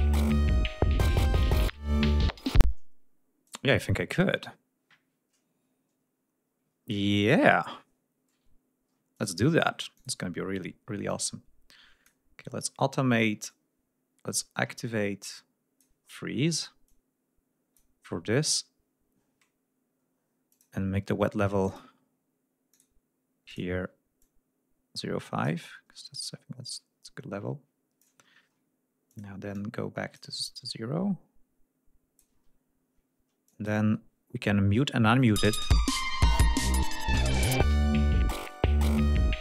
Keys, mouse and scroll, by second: 1.9 ctrl+scroll down 2, 2.8 space, 3.5 click, 3.9-4.8 scroll up 6, 5.0 scroll down 2, 6.8 ctrl+scroll up 2, 8.6 ctrl+scroll down 2, 9.2 ctrl+click, 10.0 click, 11.1 click, 13.6-16.1 drag, 16.1 ctrl+scroll up 2, 16.9 ctrl+click, 20.6 click, 21.7 click, 22.8 click, 23.6 click, 24.3-25.7 drag, 25.7 ctrl+scroll down 2, 26.8-28.3 drag, 28.3 ctrl+scroll up 2, 29.2 click, 29.6 click, 30.7-32.4 drag, 32.4-32.9 ctrl+scroll down 4, 33.6 click, 34.1-34.4 scroll up 2, 34.7 ctrl+scroll up 2, 35.1 ctrl+scroll down 2, 35.4 ctrl+space, 36.0 ctrl+scroll up 2, 37.0 ctrl+scroll up 2, 39.2 ctrl+scroll up 2.